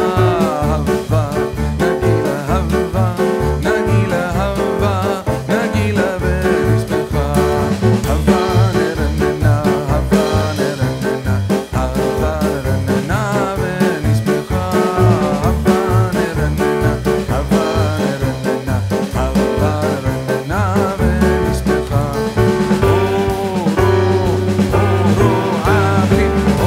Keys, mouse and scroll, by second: 0.3 click, 1.4 click, 1.6 right click, 3.4 click, 3.9 middle click, 4.5 shift+middle click, 4.8-5.8 scroll down 1, 5.8 click, 6.4 shift+middle click, 6.5 middle click, 7.2 click, 7.6 middle click, 10.4 click, 10.7-11.3 scroll up 2, 11.6 right click, 14.7 click, 25.8 middle click, 26.4 scroll down 1.